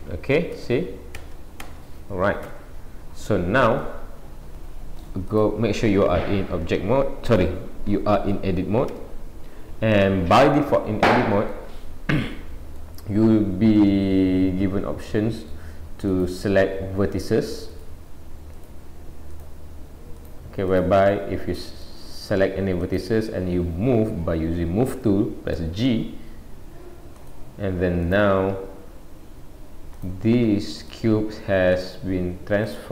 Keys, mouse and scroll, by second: 2.7 Tab, 3.8 middle click, 5.3 click, 6.1 scroll up 1, 9.0 Tab, 9.6-10.2 scroll up 1, 10.5 middle click, 10.5-11.0 scroll up 2, 12.8 middle click, 16.1 click, 17.7 click, 19.3 click, 20.3 click, 20.8 click, 21.1 middle click, 22.8 click, 28.0 click, 28.6 g, 30.8 click, 31.1 g, 32.7 click, 32.8 g.